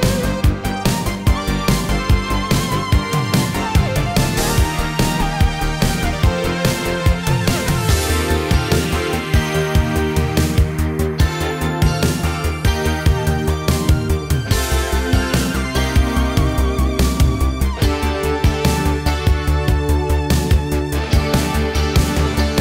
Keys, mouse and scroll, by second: 0.9 ctrl+space, 2.9 click, 4.1 Return, 4.3-10.3 typing, 10.3 Return, 12.0 click, 19.1 ctrl+d, 19.8 click, 20.7 click, 21.6 Return.